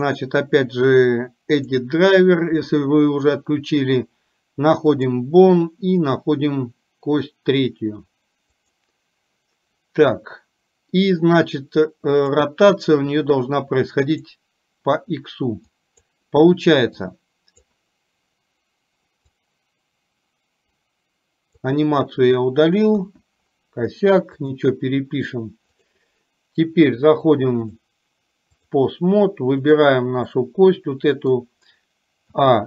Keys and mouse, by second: 0.4-15.0 right drag, 15.8 click, 17.0 click, 19.4-21.7 drag, 23.0 KP_1, 24.5 click, 27.7-28.8 drag, 29.7 click, 30.4-31.5 middle drag, 32.4 a.